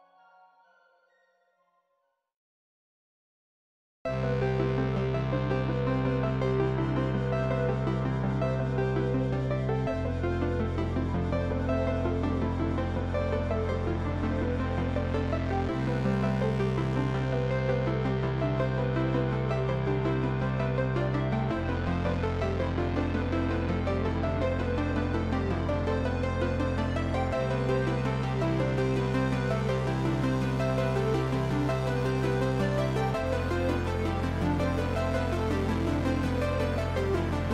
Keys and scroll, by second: 3.7 ctrl+t.